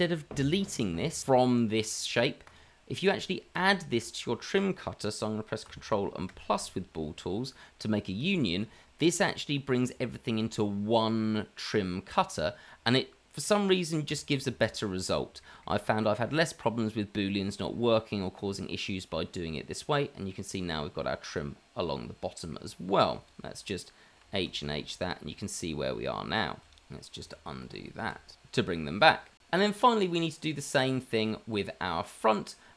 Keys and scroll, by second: 6.7 KP_Add, 8.6 KP_Add, 14.1 h, 15.7 h, 24.2 h, 24.6 h, 28.0 ctrl+z, 28.3 ctrl+z.